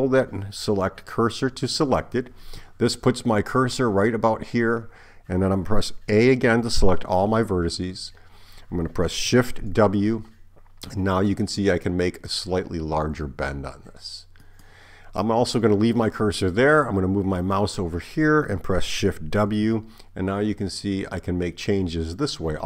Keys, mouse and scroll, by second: 6.5 a, 9.8 shift+w, 19.5 shift+w.